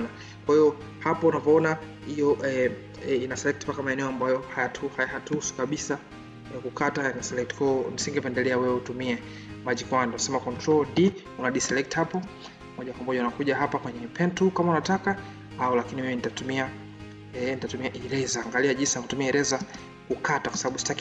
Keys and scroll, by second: 10.9 ctrl+d.